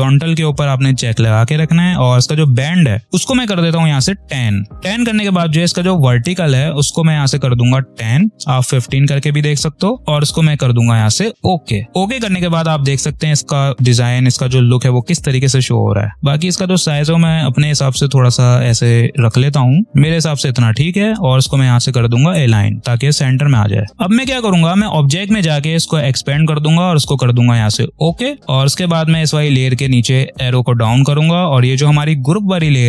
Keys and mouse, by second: 6.1 click, 7.6 1, 8.8 click, 11.3 click, 16.1-19.8 alt+shift+drag, 20.6-22.1 alt+shift+drag, 23.7 space, 24.7 click, 29.3-32.8 drag.